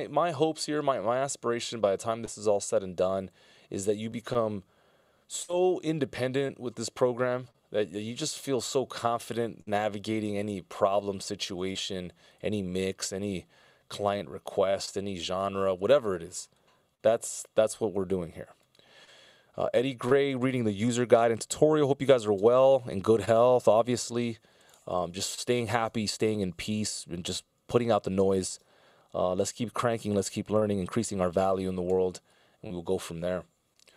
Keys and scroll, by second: 5.4 a, 18.0 F16, 20.7 super+s.